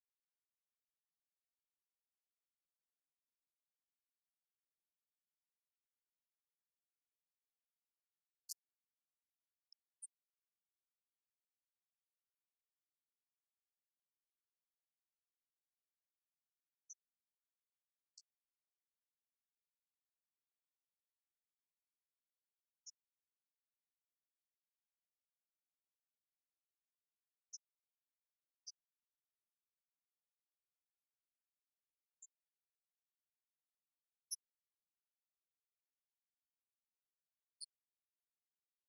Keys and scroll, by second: 7.3 ctrl+Home, 9.6 ctrl+Home, 12.5 ctrl+End.